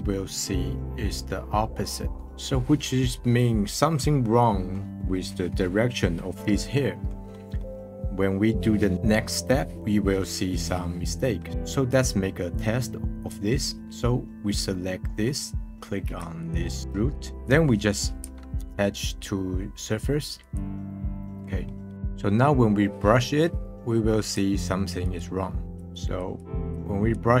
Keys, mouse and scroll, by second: 0.2-2.5 scroll down 1, 4.3-7.3 middle drag, 8.0-10.1 middle drag, 10.1-11.4 scroll down 1, 11.5 middle click, 13.1-14.7 drag, 14.7-15.6 middle drag, 15.6-16.4 scroll up 1, 16.4 ctrl+click, 17.0 middle drag, 21.1-21.6 middle drag, 21.9 click, 25.5 middle click, 25.6-27.4 drag.